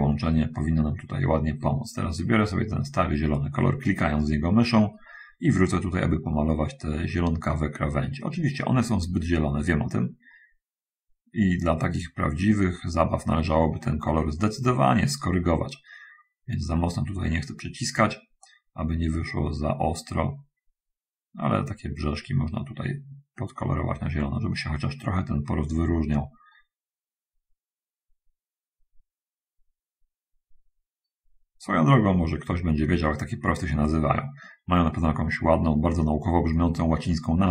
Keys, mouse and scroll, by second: 2.9 click, 5.8-36.6 drag.